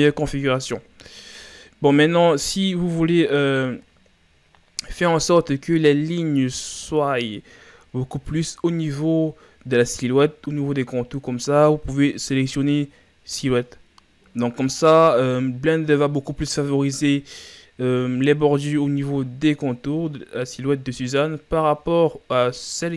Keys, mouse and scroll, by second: 2.0-9.3 drag.